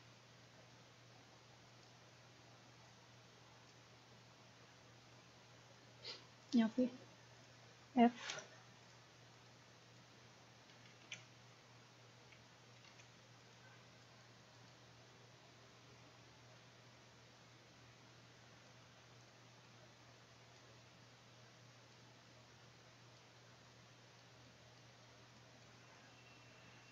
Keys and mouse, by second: 0.0-1.2 drag, 1.7 click, 3.9-5.3 middle drag, 6.4 click, 8.3 f, 11.1 ctrl+z, 11.3 click, 12.9 ctrl+z, 15.0-16.5 drag, 18.5 middle click, 18.7-26.9 drag.